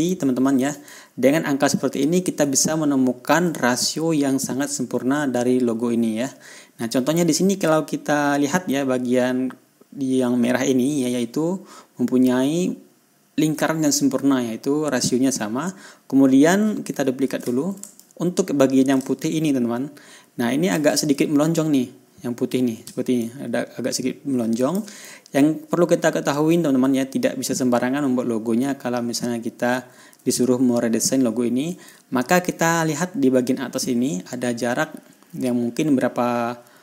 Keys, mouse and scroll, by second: 1.4 ctrl+scroll down 1, 1.9 ctrl+scroll up 1, 3.0 ctrl+scroll down 1, 3.5 ctrl+scroll up 1, 6.0 ctrl+scroll down 2, 6.3 ctrl+scroll up 2, 17.7 ctrl+d, 18.4-21.4 ctrl+drag, 23.7-25.4 shift+drag, 25.6 ctrl+shift+scroll down 2, 26.1 ctrl+scroll up 2, 32.5 ctrl+scroll up 2.